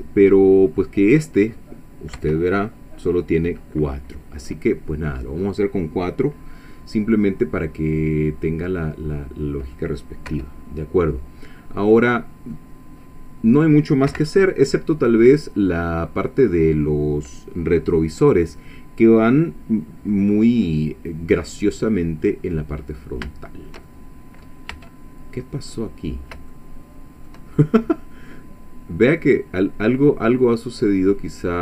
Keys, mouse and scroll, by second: 0.2-0.5 scroll up 2, 0.8 click, 2.2 KP_1, 3.8-5.7 drag, 7.0-7.3 scroll down 2, 7.4-9.9 drag, 10.3 1, 11.7-12.2 scroll up 1, 12.2 scroll down 1, 12.5-13.8 drag, 14.1 1, 15.5-16.0 scroll up 1, 19.7 scroll down 2, 20.1-22.7 middle drag, 22.9 scroll down 2, 23.3-24.6 shift+middle drag, 24.7 Tab, 25.3 scroll up 2, 25.9-26.3 scroll down 1, 26.5 shift+middle click, 28.6-29.0 scroll down 1, 29.2-31.6 middle drag.